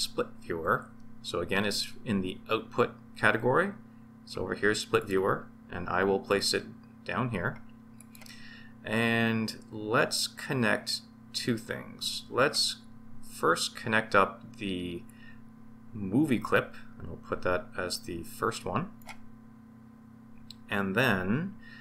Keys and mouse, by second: 0.4 shift+a, 15.0 click, 16.1-19.0 drag.